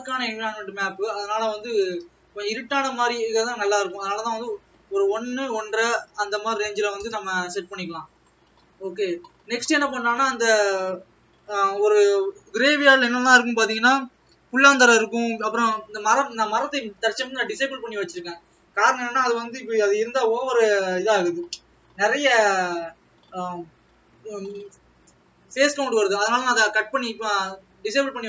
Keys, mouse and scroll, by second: 4.0 click.